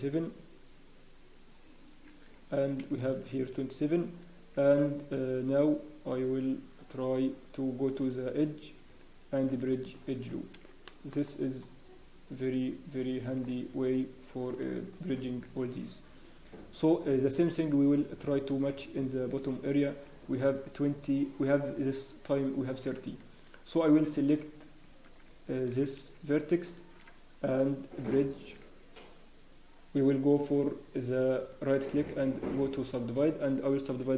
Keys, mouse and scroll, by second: 3.3 alt+shift+click, 3.5-5.8 scroll, 8.4 click, 8.8 right click, 10.2 scroll up 1, 10.8 shift+middle click, 11.2 scroll up 2, 11.4-12.0 scroll down 1, 12.1 Tab, 12.4 click, 12.9 scroll down 3, 13.1 Tab, 13.4 scroll down 1, 13.7 Tab, 14.5 click, 14.5 scroll down 1, 14.9 Tab, 15.4 scroll up 1, 17.3 click, 18.3 alt+click, 19.9 click, 22.2 scroll down 1, 23.0 Tab, 23.4 click, 23.7 Tab, 24.3 Tab, 24.3 click, 24.8 Tab, 25.5 click, 33.9 click.